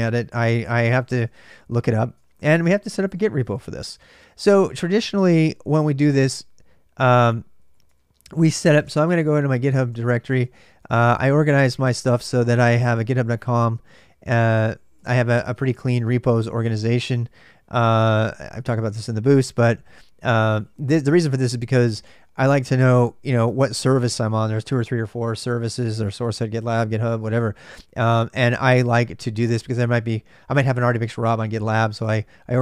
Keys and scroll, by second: 0.0-3.9 typing, 1.9 ctrl+[, 2.0 ctrl+j, 3.7 ctrl+[, 3.8 ctrl+j, 4.9 ctrl+[, 4.9 ctrl+j, 5.0-20.8 typing, 15.7 Return.